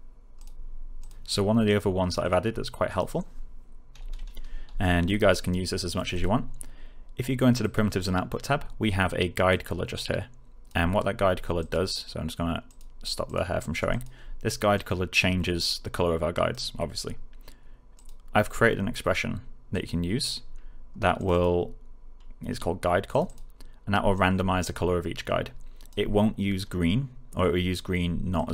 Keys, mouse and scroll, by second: 3.9 w, 4.8 alt+click, 5.2 alt+right click, 5.7 alt+middle click, 6.1 click, 9.4-10.7 click.